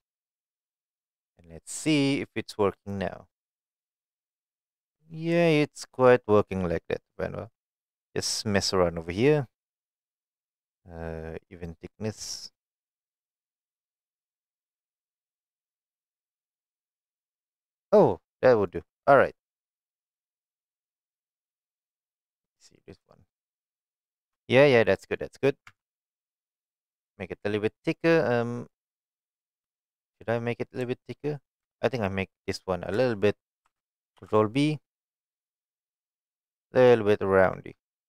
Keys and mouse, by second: 0.1 click, 0.8 click, 1.8-2.9 drag, 3.4-4.8 middle drag, 5.5-5.8 shift+middle drag, 11.7 click, 12.4 click, 13.2 click, 13.6-15.1 middle drag, 15.8-18.7 middle drag, 19.3-19.8 middle drag, 20.3-20.8 middle drag, 21.2-22.4 middle drag, 23.2-24.3 shift+middle drag, 24.8-25.2 middle drag, 25.7 Tab, 25.8 middle click, 28.0 middle click, 29.2 shift+middle click, 29.9 middle click, 33.1 shift+middle click, 34.5 ctrl+b.